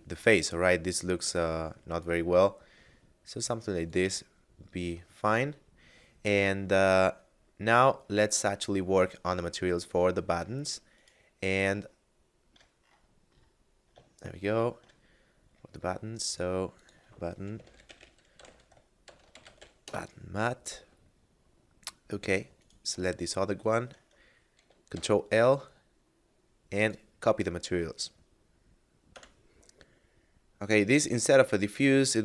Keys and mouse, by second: 3.9 click, 4.9 middle click, 8.3 middle click, 10.9 right click, 11.9 middle click, 14.1 middle click, 15.3 middle click, 16.3 click, 17.5-19.5 typing, 19.8 Return, 22.3 right click, 23.6 shift+right click, 26.8 click, 29.3 F9, 31.4 click.